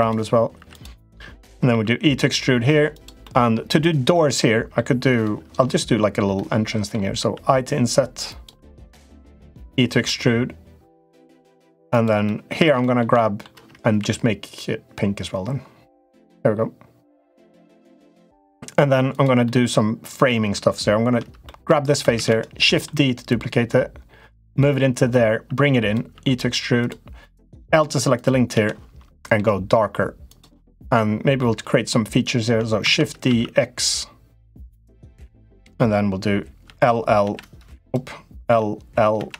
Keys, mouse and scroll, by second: 0.4 3, 0.5 click, 0.8 middle click, 1.4 e, 3.1 middle click, 4.0 middle click, 5.1 middle click, 6.2 middle click, 8.0 i, 8.9 middle click, 9.3 e, 12.1 middle click, 12.7 shift+middle click, 13.0 middle click, 13.7 g, 18.8 click, 19.2 middle click, 21.2 middle click, 21.9 shift+d, 23.0-24.4 drag, 24.8 click, 25.9 e, 27.2 click, 28.3 l, 29.1 g, 30.5 middle click, 32.6 shift+d, 36.4 l, 37.0 l, 37.5 click, 38.2 l, 38.9 l.